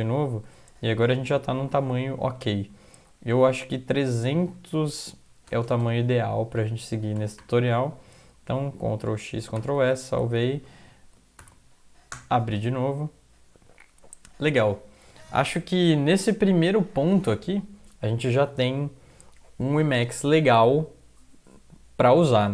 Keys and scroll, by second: 2.1 Down, 2.6 Down, 3.8 alt+F4, 3.8 Up, 3.8 Return, 3.8 Down, 4.0 Down, 4.2 Down, 4.3 Down, 4.6 End, 5.0 Left, 5.5-7.9 typing, 9.3 ctrl+x, 9.6 ctrl+s, 10.2 alt+F4, 10.7 Up, 12.1 Return.